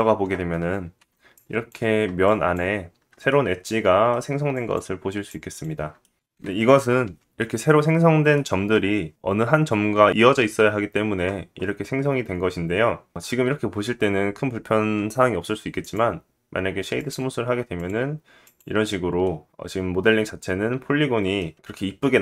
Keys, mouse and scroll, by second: 0.5 2, 0.8-4.0 drag, 2.8 middle click, 4.8 shift+click, 5.5 middle click, 6.6 1, 12.0 middle click, 13.0 Tab, 15.8 right click, 17.9-18.4 drag, 18.6-22.2 drag, 19.2 middle click.